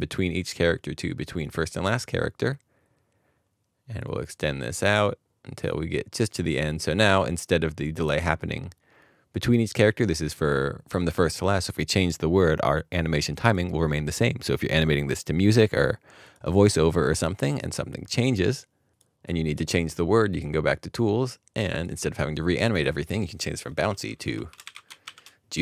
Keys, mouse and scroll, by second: 22.8 double click, 24.3-25.5 typing.